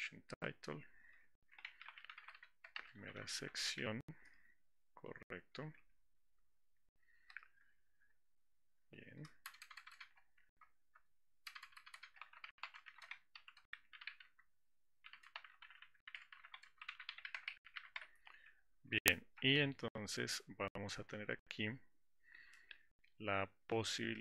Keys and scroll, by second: 0.1 Return.